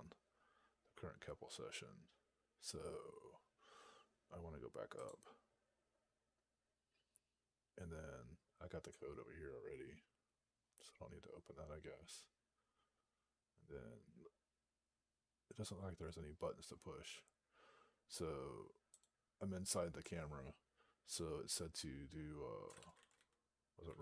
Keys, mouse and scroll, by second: 8.8-9.2 scroll down 1, 10.4-12.6 scroll up 22, 12.7-13.1 scroll down 10, 13.6 scroll down 31, 15.6-17.5 scroll up 32, 18.8 click, 22.4-24.0 typing.